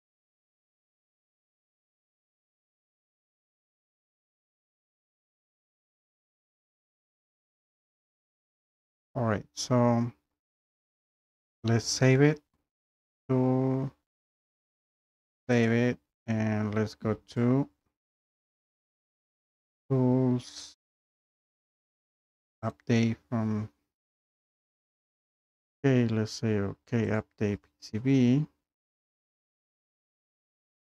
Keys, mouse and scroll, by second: 6.6 Escape.